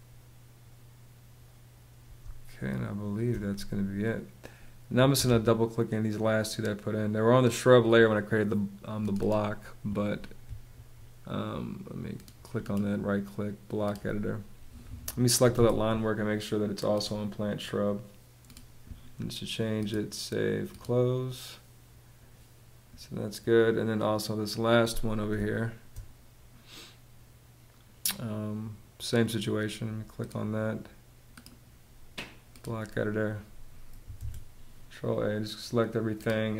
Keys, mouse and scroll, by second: 1.8 space, 4.6 Escape, 5.7 Escape, 10.3 ↺, 15.2 super+a, 24.9 space, 33.8 super+a.